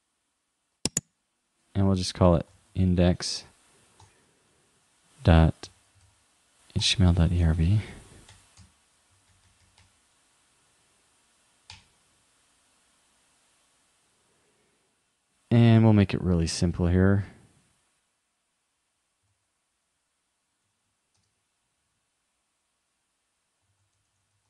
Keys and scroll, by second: 19.4 shift+,, 20.7 shift+5, 23.7 shift+2.